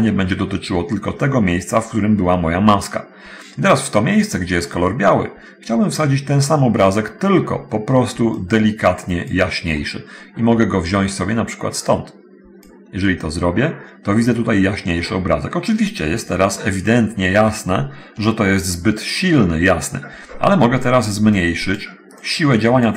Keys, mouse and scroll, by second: 3.6-4.1 scroll up 1, 4.2 middle click, 5.9 middle click, 8.6-9.7 drag, 11.4-13.1 drag, 21.6-22.1 drag, 22.5-22.9 drag.